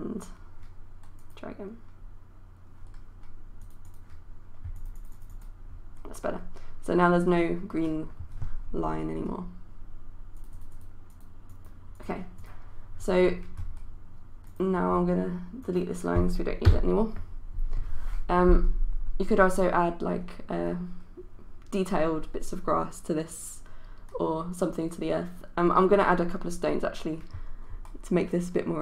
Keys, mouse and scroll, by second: 16.8 Delete.